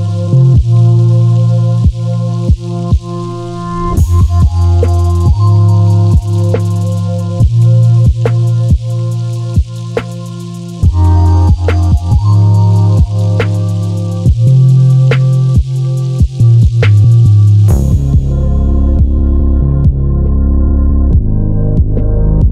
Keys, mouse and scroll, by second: 0.2 s, 3.3 click, 3.6-8.4 middle drag, 4.1 scroll down 1, 4.5 scroll up 1, 4.9 KP_Decimal, 5.4-6.3 scroll up 2, 6.3 s, 8.4 click, 8.7 g, 10.4 click, 11.0-11.3 scroll down 2, 11.3-13.2 middle drag, 12.2-12.5 scroll up 1, 13.2 click, 13.5 Tab, 14.0 click, 14.4 g, 15.0 click, 15.2 Tab, 15.6 click, 16.0 Tab, 16.4 click, 16.7 g, 17.5 Tab, 17.9 click, 18.0 scroll down 1, 18.2-21.9 middle drag, 18.8-19.3 scroll up 1, 21.9 click, 22.4 shift+d.